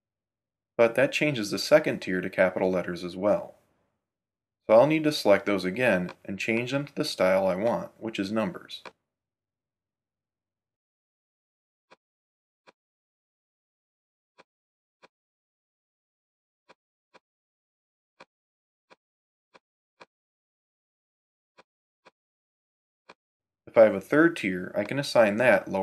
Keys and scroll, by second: 24.7 Tab.